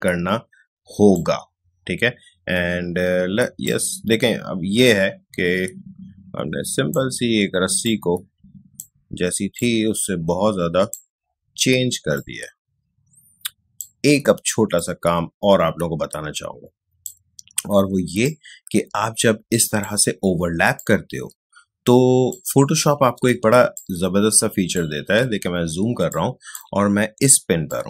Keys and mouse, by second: 3.6-23.3 drag, 23.3 space, 23.7-25.9 ctrl+drag, 25.9 space, 26.1 click, 26.4 space, 27.6-27.8 drag.